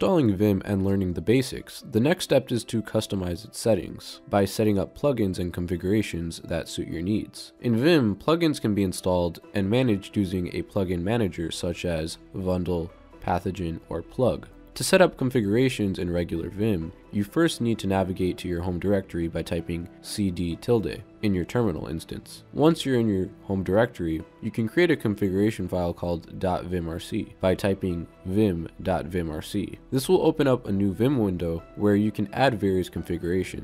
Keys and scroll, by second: 20.4-22.0 typing.